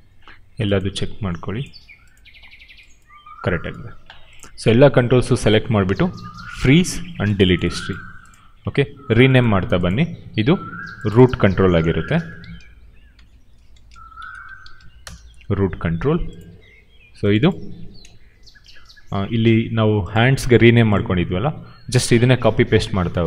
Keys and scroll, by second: 12.0-15.2 typing.